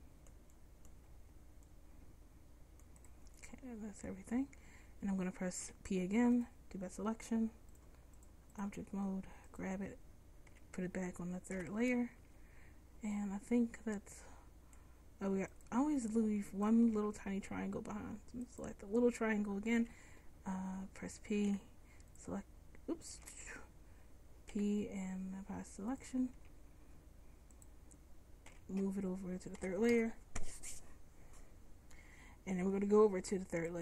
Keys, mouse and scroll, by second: 1.1 c, 4.0 middle click, 5.7 p, 8.7 p, 9.6 click, 10.6 m, 14.3 middle click, 15.6-17.0 drag, 17.0 Tab, 17.5 click, 19.9 m, 21.6 p, 23.4 ctrl+z, 24.6 p, 26.6 Tab, 28.6 m.